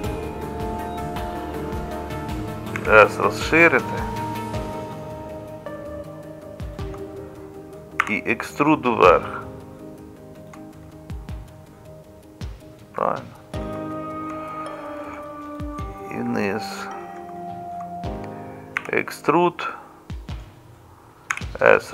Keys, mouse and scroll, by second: 2.8 s, 8.0 e, 18.8 e, 21.3 s.